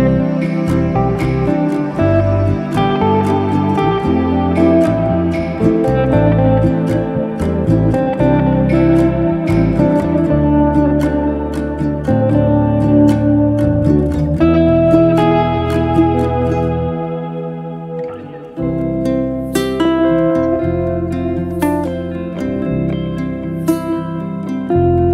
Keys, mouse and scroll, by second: 0.2 click, 0.8 s, 1.6-2.1 middle drag, 2.1 click, 2.3 middle drag, 2.6-2.9 scroll down 1, 2.9-3.6 middle drag, 3.6-4.0 scroll down 1, 4.0-5.5 middle drag, 5.8-9.1 shift+middle drag, 11.1-11.6 shift+middle drag, 11.6 drag, 11.8-13.3 middle drag, 15.4-15.8 scroll up 1, 15.8 click, 16.6 Tab, 17.0 Tab, 17.2 click, 17.5 Tab, 18.4 3, 18.7 click, 19.3 alt+click, 20.6 alt+shift+click, 21.5-22.4 shift+middle drag, 22.4 shift+click, 23.4 p, 24.8 Tab.